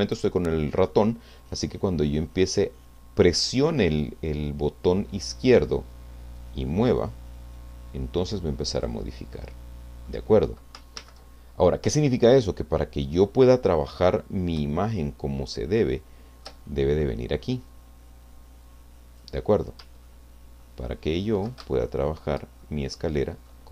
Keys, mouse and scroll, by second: 6.4-9.0 drag, 9.3 middle click, 11.2 ctrl+z, 14.8-17.7 shift+middle drag, 17.7-19.4 drag, 20.0-21.6 ctrl+middle drag, 21.7 ctrl+shift+middle click, 22.6-23.6 shift+middle drag.